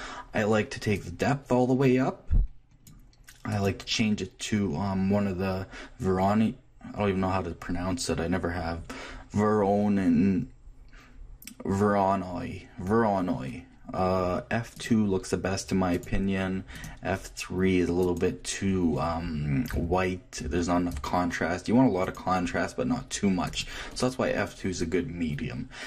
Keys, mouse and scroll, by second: 0.9-2.8 drag, 3.5-5.3 drag, 15.9-17.7 drag, 18.0-19.9 drag, 22.0-23.8 drag.